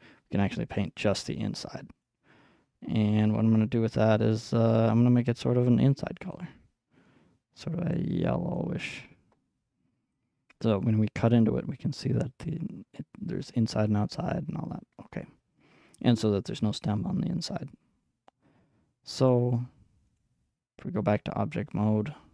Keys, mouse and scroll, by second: 2.0-4.4 middle drag, 4.4-10.0 drag, 10.1 click, 10.4-12.5 middle drag, 12.6-19.3 middle drag, 19.3-22.3 drag.